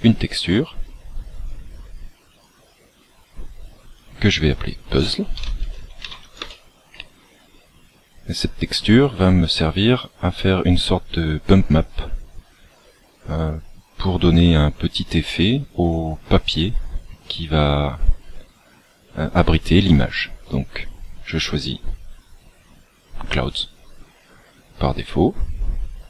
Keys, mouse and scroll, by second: 0.8-1.5 scroll up 2, 1.9 scroll up 1, 2.3 click, 4.0 click.